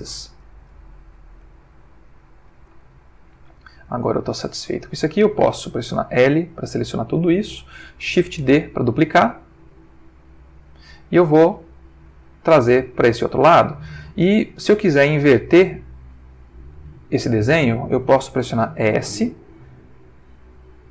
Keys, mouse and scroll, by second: 0.1 click, 1.4 g, 2.3 click, 2.9-3.5 ctrl+middle drag, 3.6-4.1 ctrl+shift+middle drag, 6.1 l, 8.4 shift+d, 13.3 click, 19.1 s.